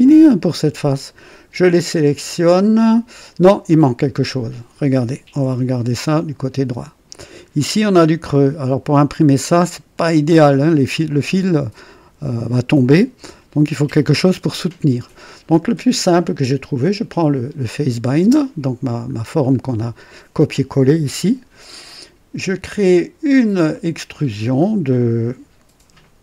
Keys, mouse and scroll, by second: 3.6 click, 5.4 KP_3, 6.0-6.3 scroll up 1, 6.5 right click, 7.3 scroll up 1, 11.7 click, 13.1 KP_2, 14.0 KP_3, 15.3 scroll down 1, 17.1 click, 18.2 space, 19.1 scroll down 1, 23.6 click.